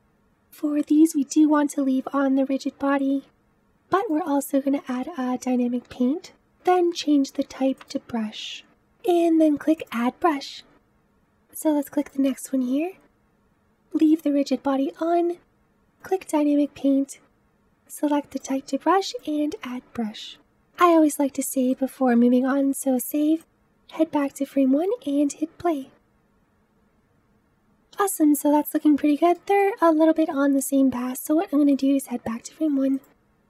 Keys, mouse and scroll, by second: 3.9-9.1 drag, 9.6-11.8 drag, 11.8 click, 15.8-20.4 drag, 20.4 ctrl+s, 21.6-23.3 middle drag, 23.3 click, 24.3 space, 27.7 space, 27.9-31.6 middle drag, 31.6-32.9 drag, 33.3 g.